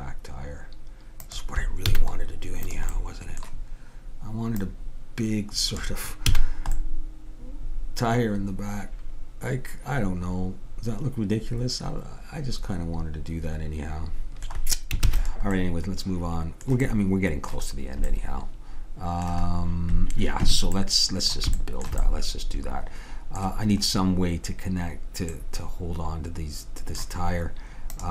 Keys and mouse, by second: 2.0 a, 2.8-6.8 drag, 6.4 a, 15.1 ctrl+s, 21.0-25.9 middle drag, 26.1-28.1 middle drag.